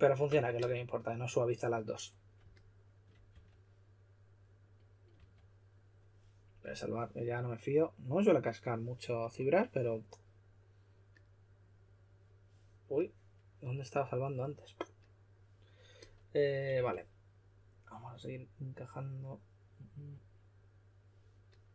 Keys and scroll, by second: 3.2 typing, 5.1 typing, 16.7 typing.